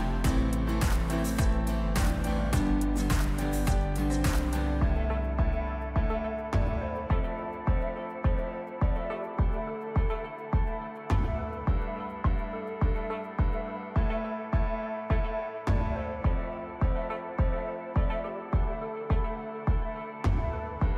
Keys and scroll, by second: 0.3 ctrl+z, 1.0 shift+z, 3.4 ctrl+z, 6.5 s, 8.4 s, 12.2 shift+z, 13.4 Tab, 17.2 shift+a, 19.8 Tab.